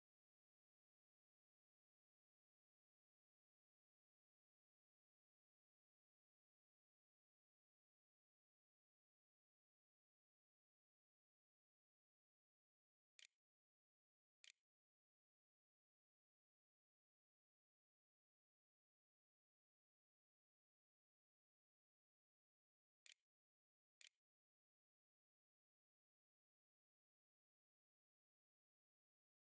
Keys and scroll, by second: 13.1-16.2 typing, 19.5-21.5 typing, 22.9-26.6 typing.